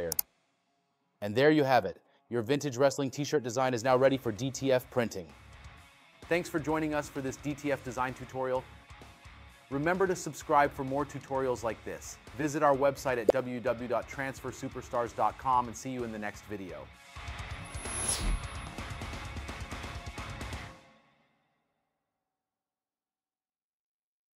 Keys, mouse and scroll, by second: 3.6 space.